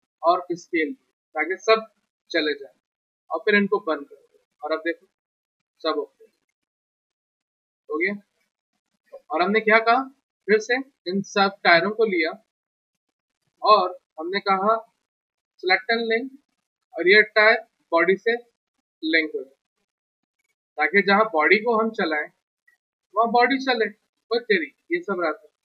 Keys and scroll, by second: 2.5 w, 20.7 w.